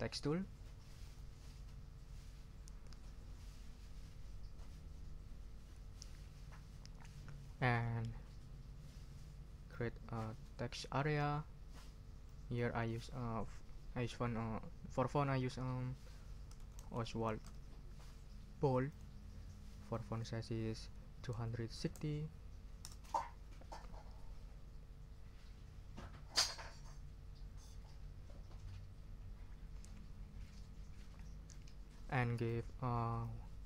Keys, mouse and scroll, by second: 1.0 click, 9.7-11.4 drag, 12.2 click, 16.3-17.9 typing, 18.9 click, 19.9 click, 21.1-22.4 typing, 22.8 Return, 32.3 click, 33.2-33.6 drag.